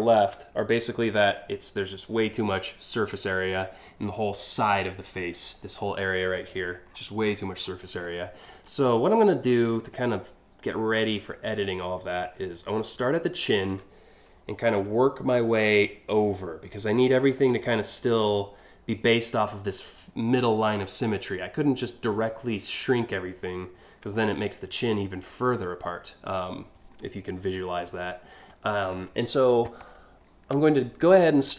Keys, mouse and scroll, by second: 6.5-7.0 scroll down 2, 12.9-13.9 scroll up 1, 14.0-14.4 alt+scroll down 2, 27.7 middle click, 28.3-29.0 scroll up 7, 29.4 scroll down 2, 29.9 scroll up 2, 30.4 scroll down 1, 30.9-31.5 alt+scroll up 5.